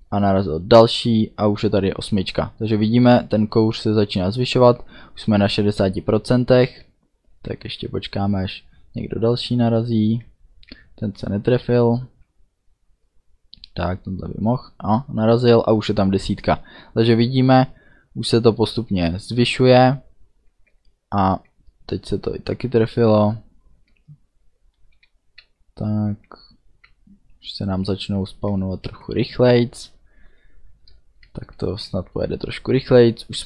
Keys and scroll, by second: 6.6 d, 10.2 d, 19.7 d, 23.9 a, 25.0 d, 27.0 a, 28.5 d.